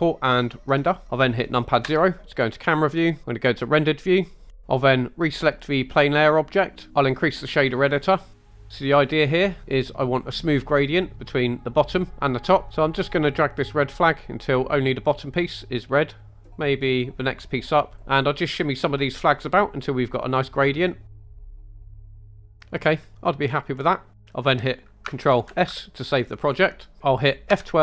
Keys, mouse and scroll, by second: 1.9 KP_0, 3.7 drag, 4.5 scroll up 2, 4.6 click, 6.9 right click, 7.0 click, 8.3 scroll up 2, 8.5-9.4 middle drag, 13.3 click, 18.0-21.3 drag, 21.3 click, 21.5 click, 21.6-22.3 drag, 22.4 click, 22.6 scroll down 2, 24.1 scroll down 2.